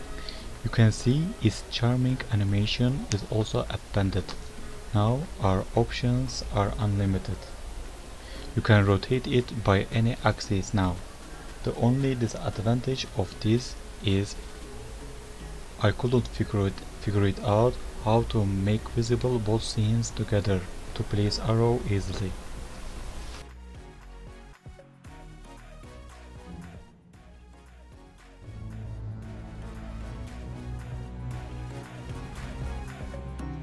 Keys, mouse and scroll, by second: 1.6 click, 2.2 s, 3.6 click, 5.6 g, 6.2 click, 6.6 i, 7.0 g, 7.6 KP_0, 7.9 click, 9.0 g, 9.4 r, 10.4 click, 12.3 click, 12.7 r, 14.4 click, 16.3 click, 16.5 click, 16.8 click, 16.8 r, 17.7 click, 18.8 click, 19.4 click, 19.8 r, 20.7 click.